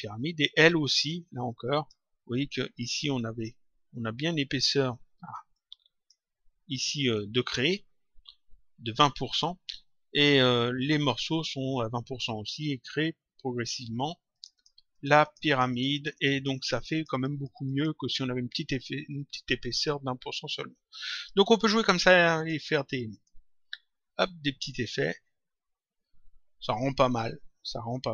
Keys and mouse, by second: 1.7 click, 5.4 click, 14.3 click, 19.0 click, 20.4 click, 22.3 click.